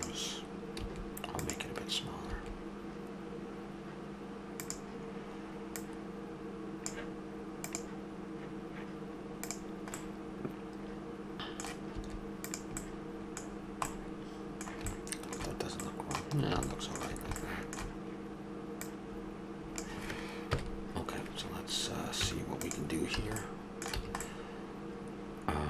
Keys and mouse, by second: 0.8 s, 2.3 s, 10.0-12.0 middle drag, 12.0 s, 12.8 middle click, 18.9-20.5 drag, 20.5 KP_Decimal, 22.2 Tab, 23.2 a, 24.0 a.